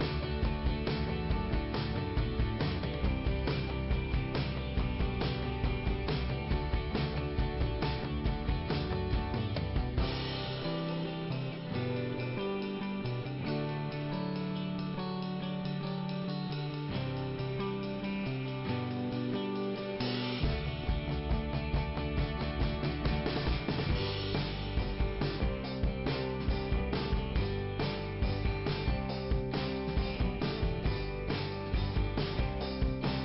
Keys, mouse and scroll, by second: 1.7 click, 3.4 click, 3.5 click, 4.2 click, 5.1 click, 6.6 click, 6.8 click, 9.9 click, 12.4 middle click, 13.5-14.0 scroll up 1, 14.5 click, 15.6 click, 16.5 middle click, 18.0 click, 19.4 click, 21.7 click, 21.8 click, 22.1 click, 22.2 double click, 23.1 double click, 27.5 scroll down 1.